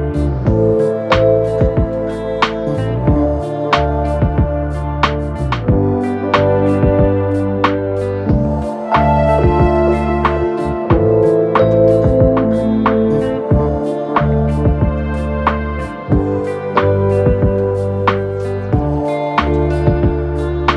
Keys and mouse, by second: 3.0 z, 4.2-20.7 middle drag, 4.7-7.2 typing, 8.8 r, 9.6 g, 10.2 z, 11.5 s, 12.8 r, 13.2 g, 14.0 s, 16.8 shift+d, 17.2 r, 19.8 g.